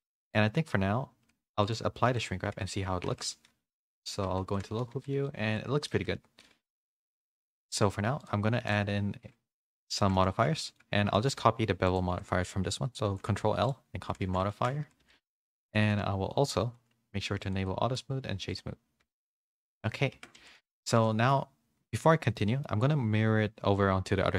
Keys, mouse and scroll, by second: 0.1 middle click, 1.6 click, 2.0 ctrl+a, 2.5 Tab, 3.7 Tab, 3.7 /, 4.2 Tab, 4.5 middle click, 4.9 a, 5.3 middle click, 5.3 a, 5.9 Tab, 6.7 ., 7.3 /, 9.5 middle click, 10.0 shift+middle click, 10.2 middle click, 10.6 shift+middle click, 11.1 middle click, 13.0 ctrl+l, 14.0 a, 14.5 shift+middle click, 14.5 a, 15.0 a, 15.2 shift+middle click, 15.4 middle click, 18.5 click, 19.4 middle click, 19.4 a, 19.7 click, 20.1 Tab, 20.4 a, 20.8 Tab, 21.0 middle click, 22.4 middle click.